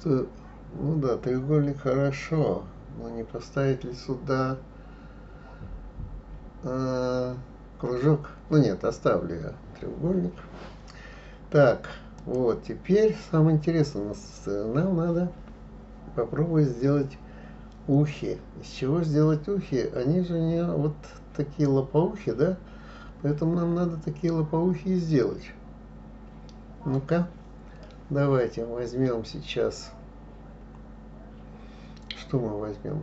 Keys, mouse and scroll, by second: 12.2 click.